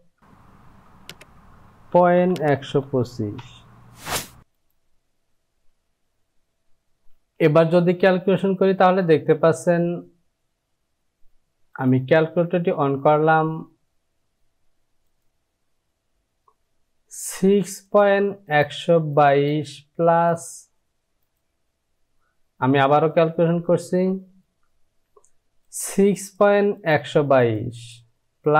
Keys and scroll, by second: 0.2 Down, 1.8 KP_Decimal, 2.2 KP_1, 2.5 KP_2.